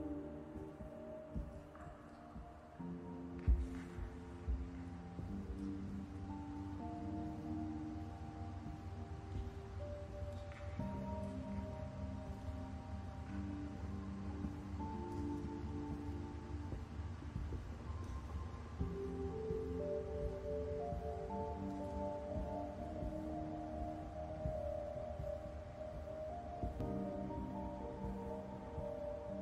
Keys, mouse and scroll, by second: 0.3 click, 0.7 scroll up 1, 1.2 click, 7.6 scroll up 2, 8.4 middle click, 9.5 scroll down 1, 9.8 middle click, 12.6 scroll up 2, 13.1 middle click, 15.4 middle click, 16.4 middle click, 19.5 middle click, 20.8 middle click, 24.3 middle click, 25.9 middle click, 25.9 middle click, 28.4 click.